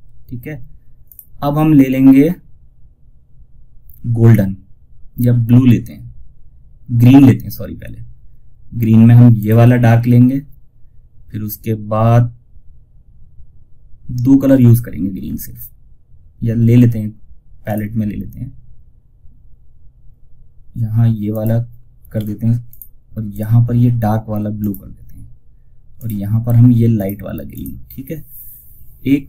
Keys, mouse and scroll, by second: 8.7 click, 16.9 click, 20.6 click, 21.5 ctrl+z, 22.0 click, 28.9 typing.